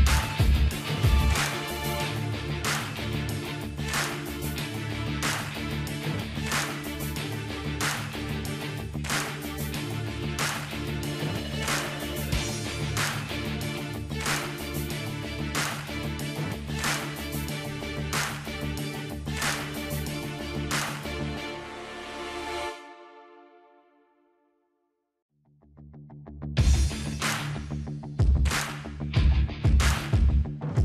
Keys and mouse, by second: 0.0-4.3 drag, 3.5 alt+h, 3.6 middle click, 5.3-8.5 drag, 8.5-9.6 middle drag, 9.6 click, 10.5 Tab, 11.0-15.1 drag, 11.9 middle click, 13.4 middle click, 15.8 click, 16.4 s, 18.5-20.4 drag, 20.4 middle click, 20.4 KP_0, 21.6-22.9 middle drag, 22.0 z, 23.1 middle click, 23.6 click, 24.2 Tab, 25.0-28.3 drag, 26.6 z, 27.7 z, 28.7-29.7 drag, 29.3 ctrl+r.